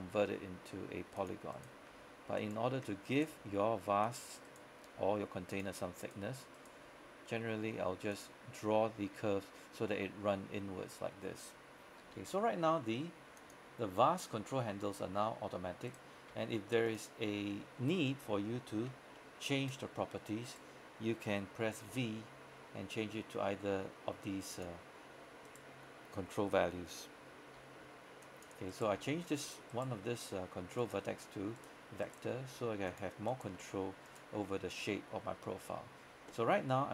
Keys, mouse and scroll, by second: 0.1 g, 1.3 click, 1.6 right click, 2.0 g, 2.4 click, 3.2 right click, 3.4 g, 4.1 click, 4.5 right click, 4.9 g, 5.6 click, 6.1 right click, 6.9 g, 8.2 click, 9.2-10.9 scroll up 1, 12.2 g, 13.5 click, 14.1-16.0 scroll down 1, 16.2 right click, 16.4 g, 16.9 click, 17.4 scroll up 1, 17.8-18.3 scroll down 1, 18.3-18.7 scroll up 1, 18.7 scroll down 1, 19.2 shift+middle click, 19.9 scroll up 1, 20.6 right click, 21.9 v, 24.6 click, 25.5 right click, 27.6 g, 28.3 click, 28.8 right click, 29.0 g, 29.5 right click, 30.1 g, 30.9 click, 31.7 right click, 32.4 g, 33.0 click, 33.4 right click, 33.7 g, 34.2 click, 34.5-36.9 scroll down 1.